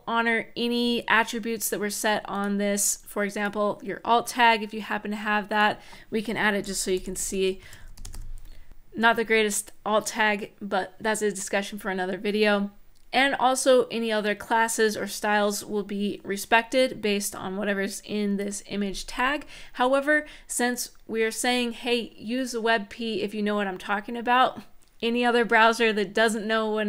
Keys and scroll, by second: 6.4-7.3 typing.